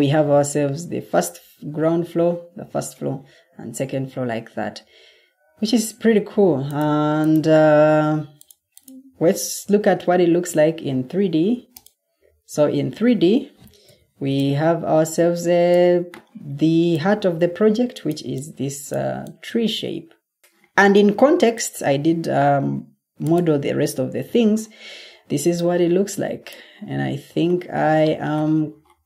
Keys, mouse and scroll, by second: 9.1 Escape.